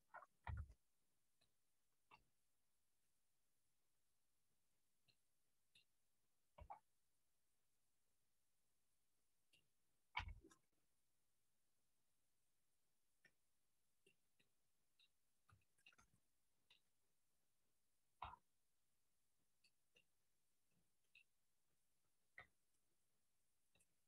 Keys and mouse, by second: 0.6 g, 2.3 KP_3, 3.8 click, 5.2 middle click, 6.6 KP_1, 8.3-9.6 drag, 10.2 KP_3, 11.9-14.2 drag, 14.5 middle click, 15.8 shift+middle click, 16.4 middle click, 18.3 r, 20.1-21.3 middle drag, 22.5 g, 23.9-24.0 middle drag.